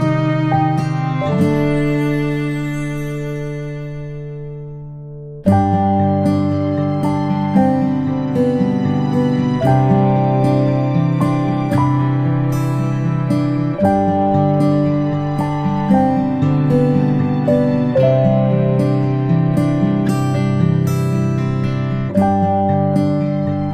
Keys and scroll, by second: 18.6 ctrl+i.